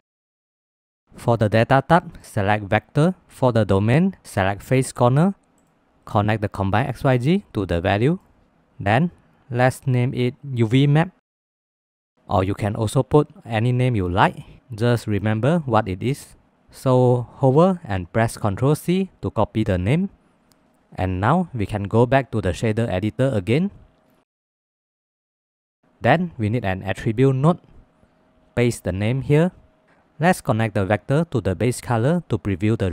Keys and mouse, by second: 0.1 click, 0.3 click, 0.8 click, 1.5-3.1 drag, 3.7-5.6 drag, 6.7-8.4 drag, 9.7-11.7 shift+middle drag, 12.1 ctrl+s, 18.2 ctrl+c, 21.9-23.1 drag, 24.3 click, 25.2 click, 26.2 shift+a, 26.6 t, 29.0 ctrl+v, 30.2-32.0 drag.